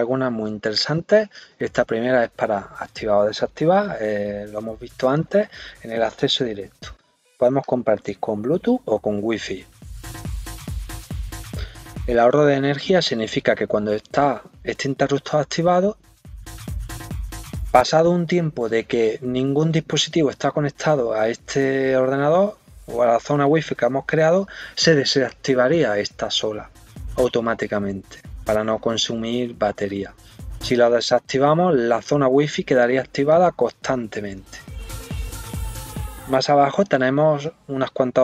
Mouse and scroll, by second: 6.7 scroll up 1, 7.6 click, 10.2 click, 11.0 scroll up 1, 11.1 scroll down 1, 30.6 click, 33.3 click.